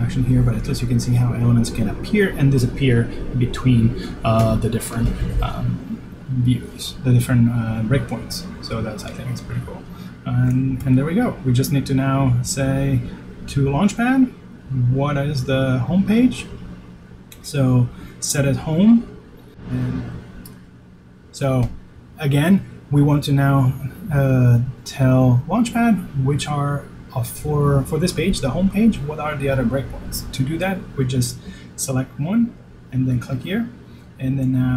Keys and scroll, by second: 14.4 shift+super+s, 15.2 super+s.